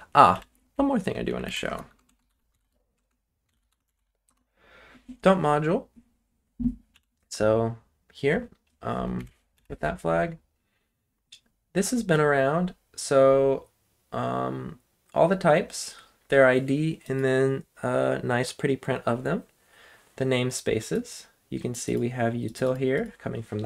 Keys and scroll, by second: 0.3 Up, 1.6-4.4 typing, 6.9 Up, 9.2 Left, 9.5 Down.